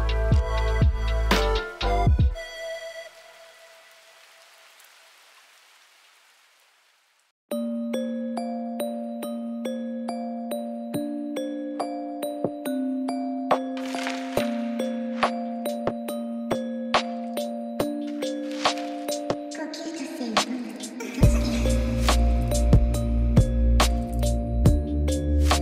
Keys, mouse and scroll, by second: 0.0 KP_Divide, 0.2 Tab, 0.4 click, 1.9 click, 2.8 alt+click, 3.2 alt+shift+click, 3.8-4.6 alt+shift+drag, 4.9 alt+shift+click, 5.3 alt+shift+drag, 5.4 alt+shift+click, 5.6 alt+shift+click, 6.1 alt+shift+click, 6.2 middle click, 6.6-7.5 alt+shift+drag, 7.6 alt+shift+click, 7.8 alt+shift+drag, 8.0 alt+shift+drag, 8.5 alt+shift+click, 8.8 middle click, 9.2 alt+shift+click, 9.3 alt+shift+click, 9.8 middle click, 10.3 alt+shift+click, 10.5 alt+shift+click, 11.0 middle click, 11.7 alt+shift+drag, 12.0 alt+shift+click, 12.2-13.0 alt+shift+drag, 13.1-13.4 alt+shift+drag, 13.6 alt+shift+click, 13.7 middle drag, 14.5-15.6 middle drag, 15.8 middle click, 16.7 shift+click, 17.7 click, 18.3 alt+shift+click, 19.0 drag, 20.7 click, 21.5-22.1 drag, 22.3 click, 23.8-24.5 drag, 25.0 click, 25.3 click.